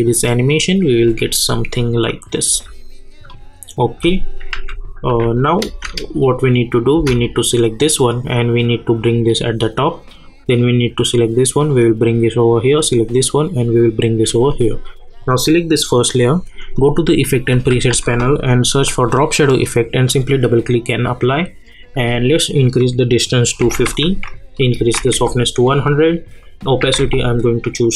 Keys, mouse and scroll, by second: 3.3 click, 4.5 u, 5.1 u, 5.7 space, 7.2-13.7 drag, 15.2 click, 17.9 ctrl+a, 19.6 click, 24.5 click.